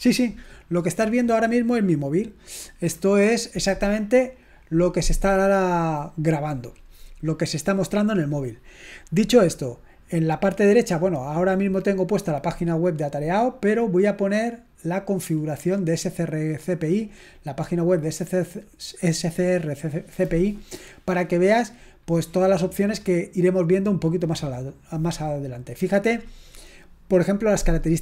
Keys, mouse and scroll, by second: 14.4 click, 15.5-16.0 scroll up 1, 16.0-16.8 scroll down 1, 22.2-23.1 scroll down 1, 23.1-24.2 scroll up 1, 24.2-24.9 scroll down 1.